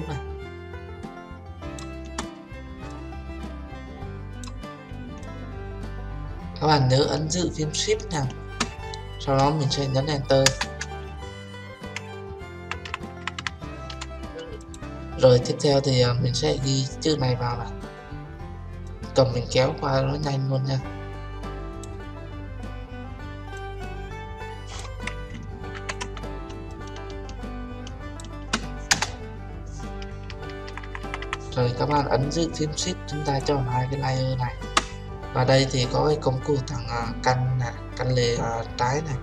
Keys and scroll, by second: 10.4 Return, 25.7 ctrl+t, 28.9 Return.